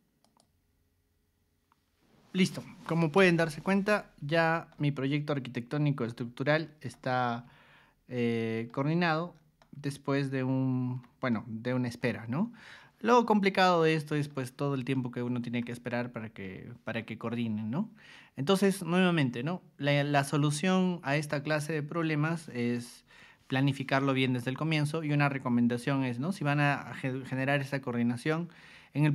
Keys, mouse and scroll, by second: 0.2 click, 4.7-5.7 shift+middle drag, 6.0-6.7 scroll up 3, 6.9-8.7 middle drag, 9.0-9.4 scroll down 4, 9.6-11.0 shift+middle drag, 11.3 middle click, 13.6 middle click, 14.9 shift+middle click, 15.9-17.0 middle drag.